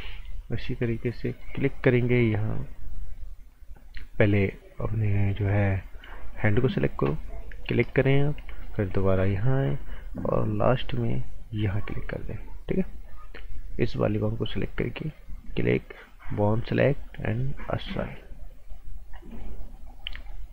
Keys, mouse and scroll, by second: 1.0 alt+Num_Lock, 1.3 alt+right click, 2.5 scroll up 1, 2.7 right click, 6.1 alt+Num_Lock, 6.2 right click, 7.6 click, 7.9 right click, 8.6 right click, 10.8 click, 19.0-19.4 scroll down 1, 19.4 right click, 20.1 scroll down 1, 20.3 right click.